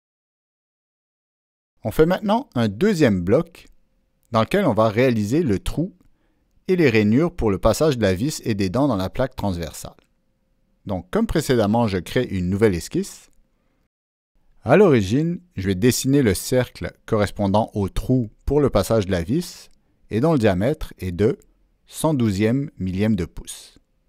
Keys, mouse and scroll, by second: 0.2 click, 0.4 Return, 1.4 Return, 1.4 click, 2.2 click, 2.4 Return, 4.1 click, 5.0 click, 7.6 ctrl+middle click, 8.3 ctrl+middle click, 8.5 click, 8.5-9.0 ctrl+scroll down 2, 9.4-10.5 ctrl+middle drag, 10.5 ctrl+scroll down 1, 15.8 right click, 17.4 click, 17.4 right click, 18.0 click, 18.7 right click, 20.1 click, 20.8 click, 23.2 click.